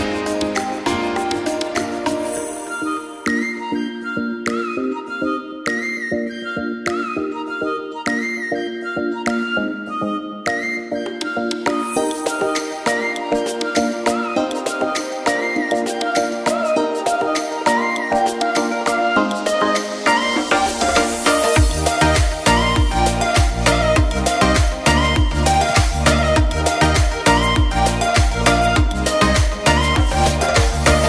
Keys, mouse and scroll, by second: 0.2 click, 0.5 KP_0, 0.8 click, 1.9-3.2 drag, 7.1 click, 7.3 s, 8.4 r, 10.3 r, 11.0 click, 12.7 click, 13.0 g, 13.5 click, 13.8 s, 15.8 click, 16.0 click, 16.1 s, 16.6 click, 16.7 click, 17.0 r, 18.0 click, 18.3 click, 18.5 g, 19.0 click, 20.0 click, 21.3 KP_0, 21.3 KP_Enter, 22.9 click, 23.9 shift+a, 24.1 s, 24.7 click, 26.9 click.